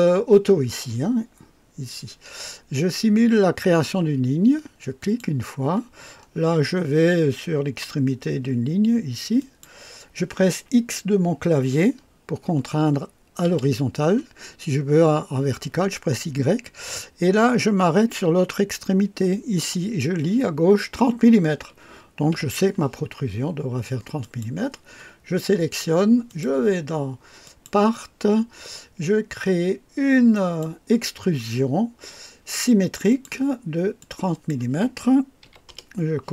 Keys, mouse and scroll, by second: 5.0 click, 6.1 scroll up 2, 9.4 click, 13.4 x, 22.3 Escape, 24.2 click, 26.3 click, 27.4 click, 30.3 click, 33.1 click, 34.0 click, 35.4 KP_3, 35.7 KP_0.